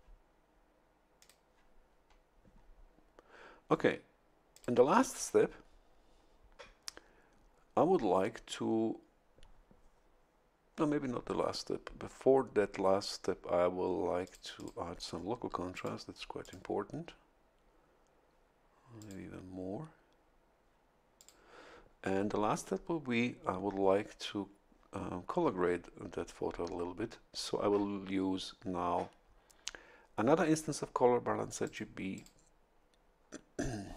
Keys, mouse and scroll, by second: 1.2 click, 4.5 click, 14.2 click, 15.7 click, 16.4 click, 19.0 click, 21.2 click, 31.6 click, 32.1 click.